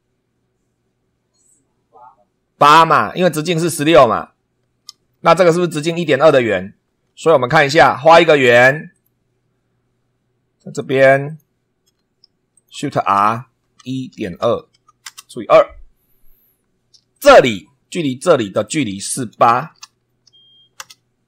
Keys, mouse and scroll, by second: 7.0 super+2, 8.9 click, 10.7 click, 11.2 click, 11.8 Escape, 12.5 shift+click, 13.0-15.2 typing, 17.1 click, 18.5 click, 19.6 shift+h, 20.3 8, 20.7 Return.